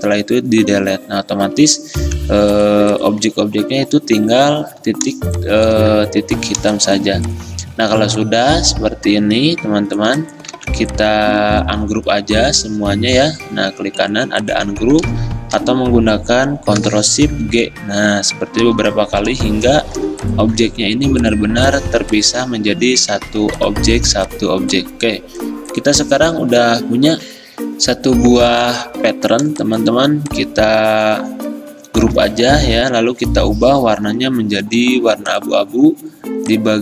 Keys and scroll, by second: 2.1 v, 5.2 z, 10.6 v, 25.8 v, 27.3 F10, 27.4 alt+Tab, 29.6 ctrl+g.